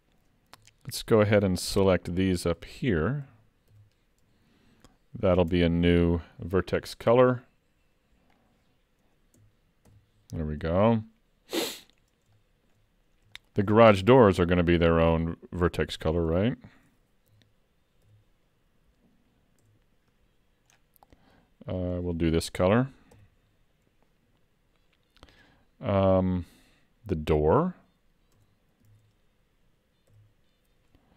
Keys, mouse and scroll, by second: 0.6 Tab, 1.3 alt+a, 2.6 l, 3.3 l, 3.8 l, 5.5 Tab, 6.9-8.1 scroll down 8, 8.4 click, 9.9 shift+k, 11.1 middle click, 12.0-12.3 scroll up 2, 12.4 shift+middle click, 14.4 alt+a, 16.0 Tab, 17.3 l, 19.0 l, 19.6 Tab, 20.8-21.1 scroll down 6, 21.9 click, 23.2 shift+k, 28.4 Tab, 28.9 alt+a, 30.2 l.